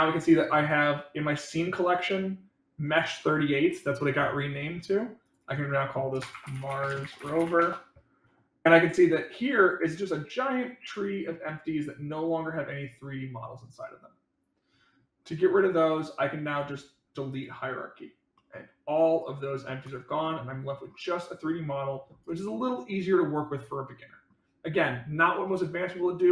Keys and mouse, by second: 5.2-8.2 drag, 9.1 click, 11.4 click, 12.1 click, 18.3-19.7 middle drag, 20.2 middle click, 21.4 click, 22.4-24.2 middle drag, 25.4 middle click.